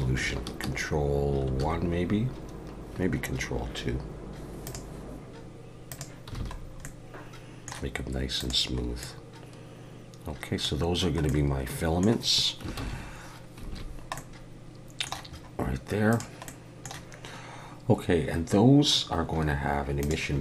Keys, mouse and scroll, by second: 1.5 ctrl+1, 4.7 click, 5.9 click, 6.4 alt+a, 6.6 scroll down 2, 6.8 middle click, 8.4 click, 8.8 scroll up 2, 9.0 middle click, 10.8-11.3 scroll down 2, 11.3 middle click, 12.8 ctrl+s, 13.7 alt+a, 13.9 scroll down 2, 14.2 middle click, 15.3-16.1 scroll up 2, 16.1 click, 16.5 middle click, 20.0 click.